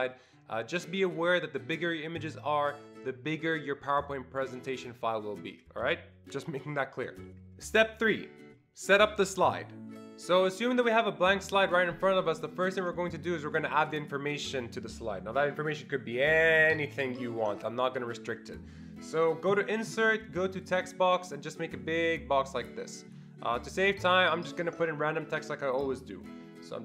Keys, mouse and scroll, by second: 19.5 click, 20.6 click, 21.9-25.8 drag.